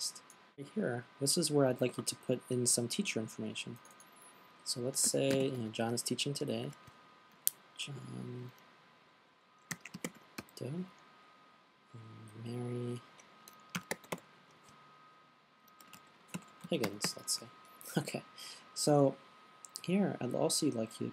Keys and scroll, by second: 5.3-6.4 typing, 9.9-18.0 typing.